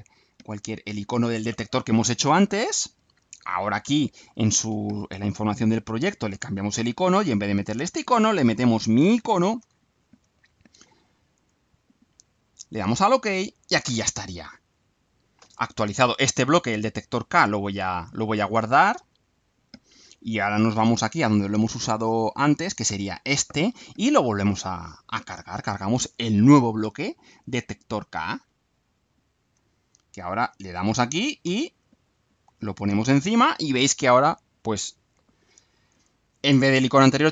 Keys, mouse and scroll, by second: 1.3 click, 5.6 click, 6.8 click, 8.4 click, 9.6-10.3 alt+drag, 11.4 click, 12.4 click, 19.0 click, 20.6 click, 22.8 click, 24.8 click, 28.2 click, 29.6-30.1 alt+drag, 30.4 alt+click, 32.6 click.